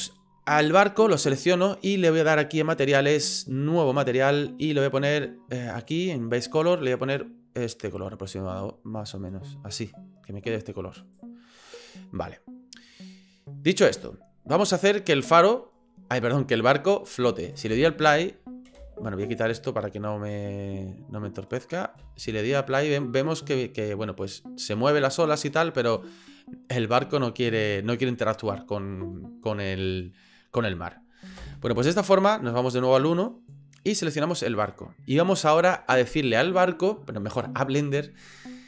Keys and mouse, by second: 1.0 right click, 5.9 click, 11.0 right click, 17.7 space, 18.8 space, 22.0 space, 23.2 click, 23.9-25.4 middle drag, 31.5 space, 31.8-32.9 drag, 33.2 click, 34.5 right click.